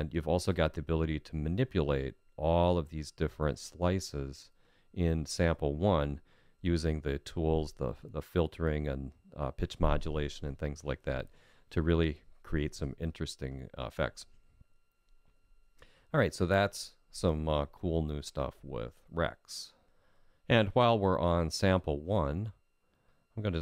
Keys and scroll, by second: 23.0 F6.